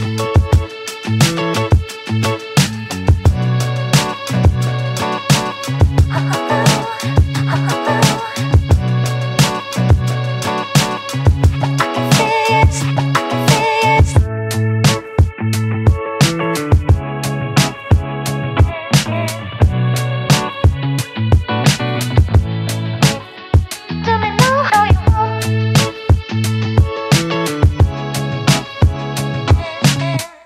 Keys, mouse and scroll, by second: 0.6 alt+click, 1.2 3, 1.9 ctrl+z, 2.0 ctrl+z, 2.4 f, 3.3 click, 3.4 alt+right click, 3.5-3.9 alt+drag, 3.9 alt+right click, 4.2 click, 4.4 alt+right click, 4.5 Tab, 4.7 alt+drag, 6.6 click, 7.6 alt+right click, 7.7-8.3 alt+drag, 8.3 Tab, 8.4-8.8 alt+drag, 9.2 click, 9.4-9.7 alt+right drag, 9.7 click, 10.0 click, 10.2 alt+click, 10.8 `, 11.0 z, 11.2-11.6 scroll up 1, 11.6 1, 12.2 Tab, 12.6 1, 12.8 scroll down 1, 13.0 click, 13.5 scroll up 1, 14.0 click, 15.1 click, 16.1 click, 16.4 alt+middle click, 16.7 scroll down 1, 17.0 click, 17.6 click, 18.5 ctrl+z, 19.0 s, 20.2 click, 20.6 click, 20.8 alt+right click, 20.9 alt+click, 21.2 z, 21.3 click, 21.4 alt+click, 21.8 Tab, 22.0 alt+right click, 22.2 Tab, 22.3 alt+click, 22.6 `, 22.9 click, 23.9 shift+click, 24.4 shift+click, 24.9 alt+middle click, 25.2 shift+click, 25.7 shift+click, 26.0 alt+click, 26.3 z, 26.5 alt+middle click, 26.7 3, 26.9 right click, 28.1 right click, 28.8 alt+click, 29.8 click, 30.1 click, 30.3 alt+click.